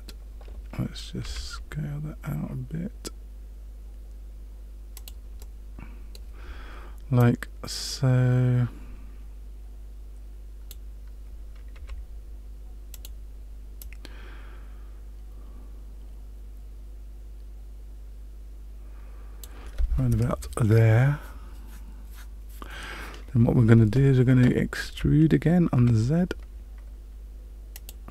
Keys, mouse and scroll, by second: 1.2 s, 5.4 middle click, 7.2 click, 11.7 s, 13.8 click, 24.9 e.